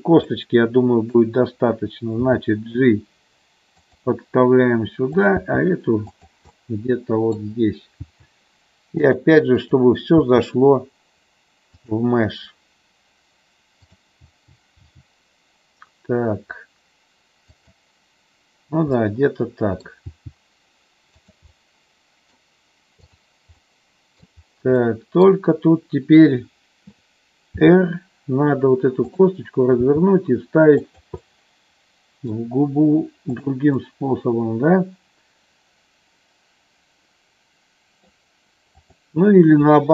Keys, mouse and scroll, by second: 0.3 middle click, 2.3 g, 3.8 click, 5.1 click, 5.4 g, 6.1 click, 6.5 middle click, 8.0 g, 9.0 click, 9.7 click, 10.3 g, 11.8 click, 13.9 click, 14.2 g, 14.7 g, 17.5 click, 18.9 middle click, 20.0 g, 21.1 click, 21.5 middle click, 23.1 click, 23.5 middle click, 24.8 middle click, 27.5 r, 29.8 g, 30.8 click, 31.3 middle click, 33.8-38.0 middle drag, 38.8 click.